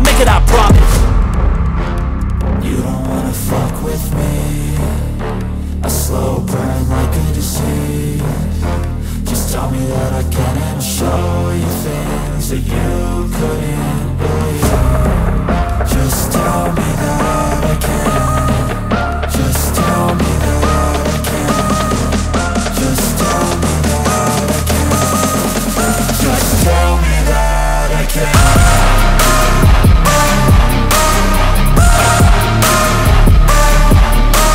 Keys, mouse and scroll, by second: 9.0 ctrl+super+z, 11.4 right click, 23.5 ctrl+super+z, 24.9 ctrl+super+z, 25.5 ctrl+super+z, 25.8 ctrl+super+z, 27.2 ctrl+super+z, 27.8 ctrl+super+z.